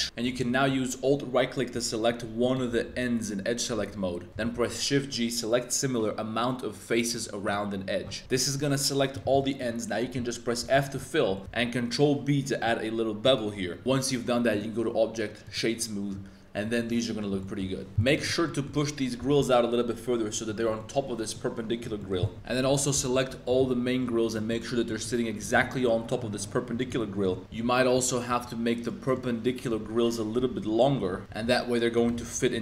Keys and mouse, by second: 0.0 2, 0.2 a, 0.3 a, 0.6 a, 2.4 alt+click, 4.4 shift+g, 8.2 z, 8.5 click, 9.3 z, 9.4 click, 10.6 f, 10.8 shift+middle click, 11.3 shift+middle click, 11.5 super+b, 13.8 Tab, 14.6 click, 17.1 middle click, 17.3 shift+middle click, 17.9 z, 18.0 middle click, 18.4 middle click, 19.2 g, 19.3 y, 20.4 click, 20.8 middle click, 22.0 shift+middle click, 22.2 middle click, 22.3 super+z, 23.1 super+l, 23.8 shift+click, 24.0 middle click, 24.3 middle click, 24.8 middle click, 25.4 g, 26.7 shift+click, 26.9 middle click, 27.4 a, 27.5 l, 28.3 l, 28.8 middle click, 29.7-32.1 typing, 31.9 click.